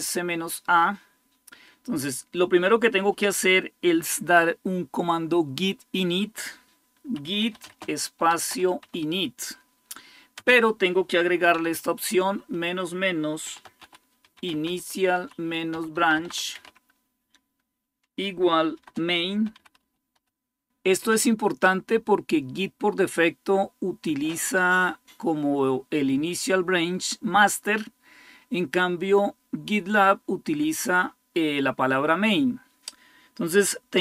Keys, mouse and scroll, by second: 6.7-9.1 typing, 10.1 typing, 11.3 typing, 13.0-16.9 typing, 18.6-20.4 typing, 31.3 Left, 31.4 Left, 31.6 Left.